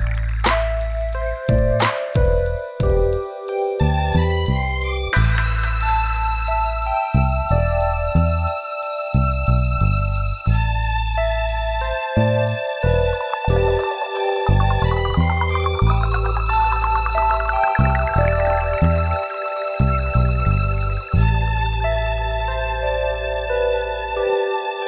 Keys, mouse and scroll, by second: 0.1 click, 0.2 click, 2.5 click, 3.4 click, 3.9 scroll up 1, 5.2 click, 10.3 middle click, 11.0 scroll up 1, 12.1 click, 12.2 click, 12.8 click, 14.0 click, 15.9 middle click, 16.6 scroll down 1, 19.1 click, 20.9 scroll down 2, 21.7 middle click, 22.6 click, 23.4 scroll up 2, 24.6 click.